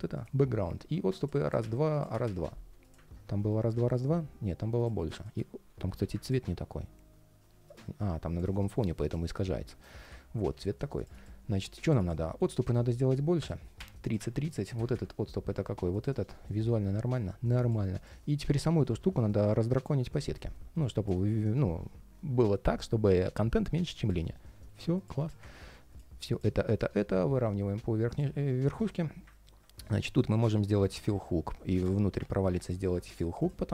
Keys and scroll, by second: 3.1 ctrl+shift+4, 18.2 ctrl+shift+4, 24.0 ctrl+shift+4, 24.7 ctrl+shift+4.